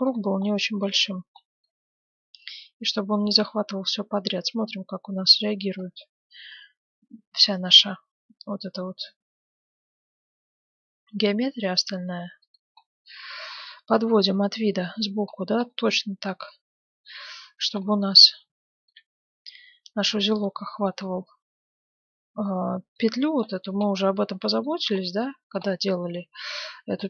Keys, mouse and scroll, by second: 12.7-14.8 middle drag, 13.9 KP_1, 14.2 KP_3, 15.2 middle click, 16.1 z, 17.3 z, 18.2 g, 19.3 middle click, 20.8-22.9 middle drag, 22.9-23.7 scroll down 1, 23.7-27.0 middle drag, 25.0 Tab.